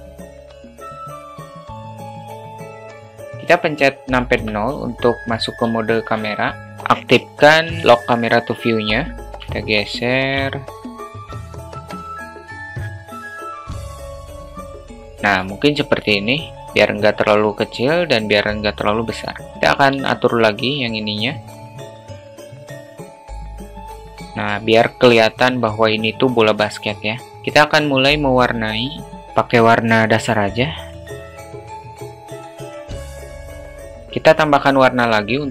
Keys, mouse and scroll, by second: 1.3 click, 2.5 click, 4.9 KP_0, 6.4 alt+shift+middle click, 7.8 q, 9.3-9.9 alt+shift+middle drag, 10.9 alt+shift+middle click, 11.8 shift+middle click, 12.1 q, 12.6 alt+shift+middle drag, 12.8 q, 13.5 q, 13.8 alt+shift+middle click, 13.9 q, 14.1 shift+middle click, 15.1 alt+shift+middle click, 16.7 q, 17.9 click, 19.6-20.4 drag, 20.5 ctrl+z, 21.7 click, 22.8 click, 23.5 click, 24.0 click, 25.7 click, 27.0 click.